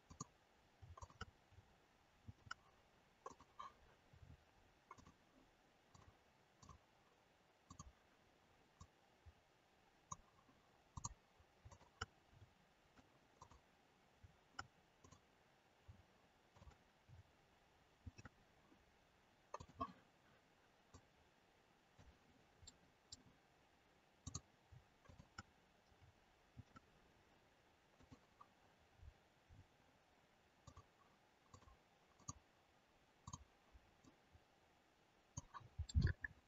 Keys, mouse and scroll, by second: 0.0 click, 0.9 shift+click, 2.2 ctrl+shift+c, 4.8 click, 4.8-5.2 scroll down 5, 6.5 click, 8.7 click, 10.8 click, 11.6 shift+click, 12.0 shift+click, 13.3 click, 15.0 click, 16.4 shift+click, 16.9 shift+click, 18.0 ctrl+shift+c, 20.9 click, 22.6 middle click, 24.2 click, 25.1 shift+click, 26.4 ctrl+shift+c, 28.9-30.6 scroll down 9, 30.6 click, 32.1 click, 34.0 click, 35.8 middle click.